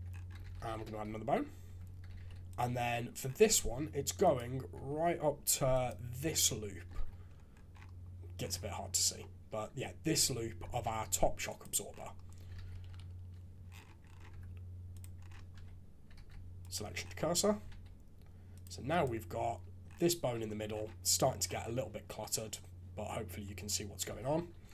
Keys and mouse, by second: 0.4 alt+a, 1.6 Tab, 2.2 alt+a, 4.7 Tab, 5.7 alt+click, 6.4 click, 7.0 shift+z, 9.2 click, 10.8 shift+s, 12.6 shift+z, 12.8 KP_3, 14.3 Tab, 15.5 Tab, 16.1 shift+s, 17.7 alt+a, 18.6 click, 24.0 F2.